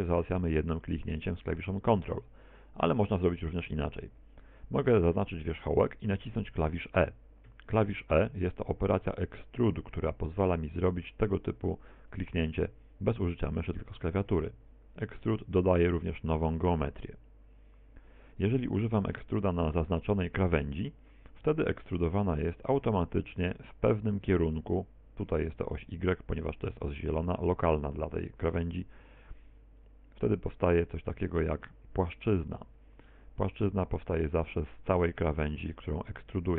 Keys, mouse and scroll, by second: 0.3 ctrl+click, 1.1 ctrl+click, 4.3 right click, 7.6 e, 14.3 click, 15.2 e, 16.2 e, 16.8 click, 19.3 right click, 19.5 right click, 20.3 shift+right click, 22.3 e, 31.5 click, 32.3 middle click, 32.7 z, 33.1 middle click, 35.5 right click, 35.9 shift+right click.